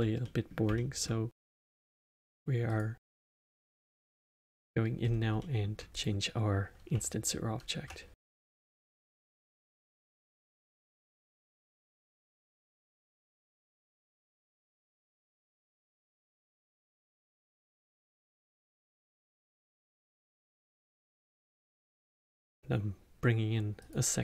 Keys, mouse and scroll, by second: 2.6 click, 3.5 click, 4.2-5.0 alt+middle drag, 5.0-5.3 scroll down 3, 5.3-5.9 middle drag, 5.9 click, 6.8 Tab, 9.1 2, 10.0 click, 11.1 g, 15.9-18.5 alt+middle drag, 18.5 Tab, 19.9-21.8 alt+middle drag, 22.3 shift+a.